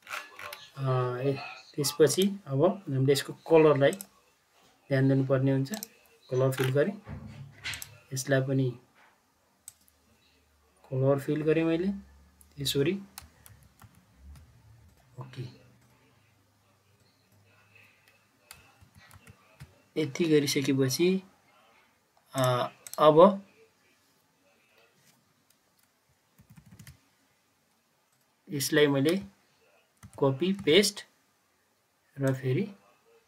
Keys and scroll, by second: 13.4 ctrl+z, 13.7 ctrl+z, 18.7 ctrl+z, 19.0 ctrl+z, 26.4 ctrl+Page_Down, 26.5 ctrl+Page_Down, 26.7 ctrl+Page_Down, 30.0 ctrl+c, 30.5 ctrl+v.